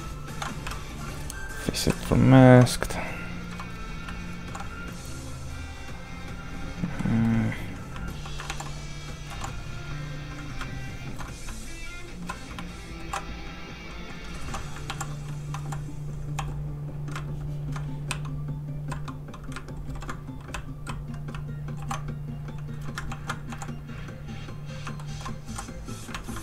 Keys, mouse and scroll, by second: 0.6 shift+click, 0.7 w, 2.4 alt+m, 4.3 alt+shift+h, 6.8 shift+h, 6.9 shift+middle click, 7.9 alt+middle click, 8.1 alt+h, 9.3 h, 9.7 h, 10.7 ctrl+shift+click, 11.4 shift+click, 11.5 w, 13.0 alt+m, 14.4 alt+super+h, 15.5 h, 15.6 h, 17.2 ctrl+shift+click, 18.1 shift+click, 18.2 w, 19.8 ctrl+i, 20.5 i, 20.6 w, 21.8 alt+m, 23.1 ctrl+shift+h, 24.9 shift+middle click, 25.4 middle click, 25.5 h.